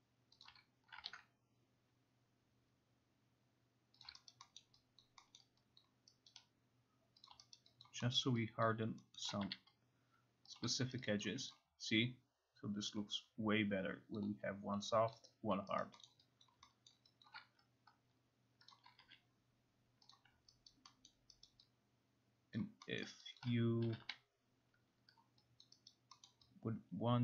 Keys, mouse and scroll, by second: 0.4 click, 1.1 ctrl+z, 4.0 click, 4.3 alt+right click, 4.6 alt+middle click, 5.0 alt+click, 5.4 alt+middle click, 6.3 alt+right click, 7.3 click, 7.6 alt+right click, 7.8 alt+click, 8.2 alt+middle click, 8.7 alt+middle click, 9.5 alt+middle click, 9.5 q, 10.6 click, 11.0 alt+right click, 11.3 alt+click, 11.5 click, 14.2 alt+click, 15.1 alt+click, 15.8 alt+right click, 15.8 alt+click, 16.1 alt+middle click, 16.4 alt+click, 16.9 alt+middle click, 17.2 alt+click, 18.7 click, 19.0 q, 20.1 click, 20.7 alt+right click, 21.1 alt+middle click, 21.5 alt+right click, 22.6 alt+click, 23.0 alt+middle click, 23.4 alt+click, 23.9 k, 24.1 k, 25.6 alt+click, 26.3 alt+middle click.